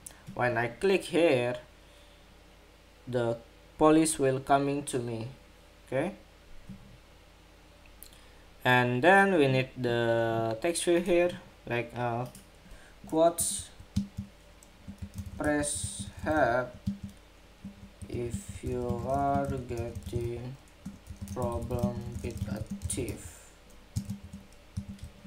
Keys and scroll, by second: 24.6 super+a.